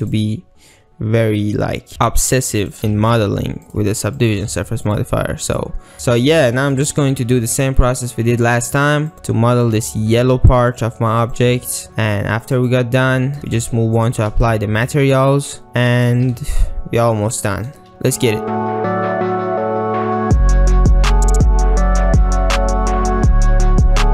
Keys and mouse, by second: 2.6 click, 2.8 g, 2.9 g, 4.3 click, 4.5 g, 5.8 click, 5.9 ctrl+z, 6.6 shift+click, 7.3 ctrl+r, 8.8 click, 9.1 g, 9.6 click, 9.8 g, 10.8 shift+click, 11.4 click, 11.6 shift+g, 12.6 click, 13.3 shift+click, 13.5 ctrl+click, 14.0 click, 14.3 g, 16.1 click, 16.4 g, 17.4 shift+click, 18.6-24.1 typing, 18.8 ctrl+alt+z, 20.1 ctrl+r, 20.3 click, 21.1 ctrl+r, 21.8 alt+z, 22.0 ctrl+r, 22.2 alt+z, 23.0 click, 23.2 alt+z, 23.2 ctrl+e, 23.2 ctrl+r, 23.7 click, 24.0 click.